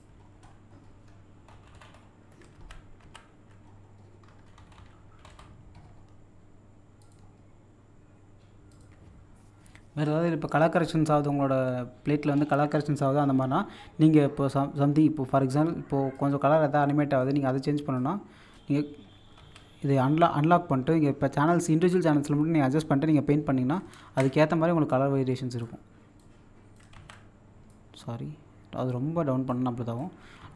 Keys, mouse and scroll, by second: 0.2-1.4 scroll down 1, 2.4 ctrl+scroll down 1, 2.6 ctrl+z, 3.6-4.5 scroll up 1, 7.0 click, 8.7 click, 16.1-19.4 drag, 19.4 ctrl+z, 19.9 click, 21.7-24.0 drag, 24.0 ctrl+z, 24.9-26.9 drag, 26.9 ctrl+z, 27.7-30.4 drag, 30.4 ctrl+z.